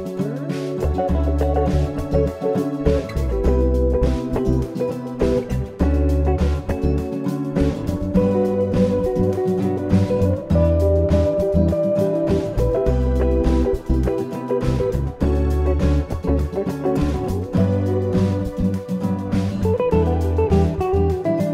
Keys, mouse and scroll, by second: 1.7 middle click, 10.9 click, 14.5 click, 18.6 click, 20.3 click.